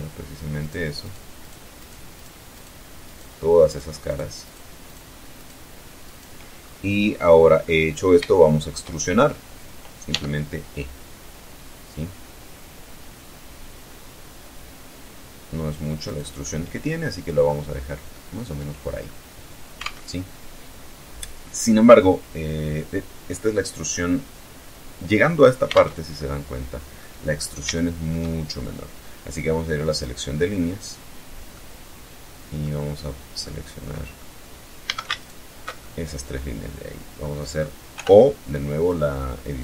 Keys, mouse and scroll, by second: 0.2 shift+right click, 0.7 shift+right click, 1.0-1.7 shift+right drag, 1.8 shift+right click, 2.2 shift+right click, 2.9 shift+right click, 3.3 shift+right click, 3.7 shift+right click, 4.1 shift+right click, 4.6 shift+right click, 5.2 shift+right click, 5.8 shift+scroll up 3, 6.5 scroll down 2, 6.8-8.7 right drag, 9.3 e, 15.3 click, 15.6-16.4 middle drag, 16.6 scroll up 1, 16.9 scroll down 1, 17.3-18.5 middle drag, 19.1 alt+Tab, 24.9 alt+Tab, 25.4 alt+middle click, 26.6 scroll up 1, 26.9-28.1 shift+middle drag, 29.1 click, 29.7-30.2 scroll up 1, 30.7-32.0 middle drag, 32.7-33.5 middle drag, 34.1 a, 34.4 alt+shift+right click, 35.0-36.6 alt+shift+middle drag, 37.1 o, 38.1 click, 38.7-39.1 scroll down 1, 39.3-39.6 scroll up 2.